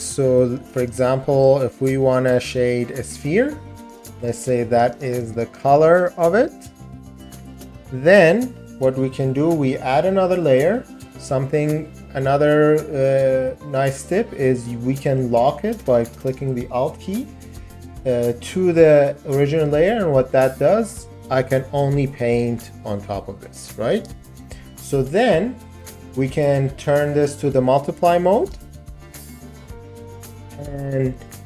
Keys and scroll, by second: 0.5 ], 3.8 [, 23.9 ctrl+z, 29.3 ].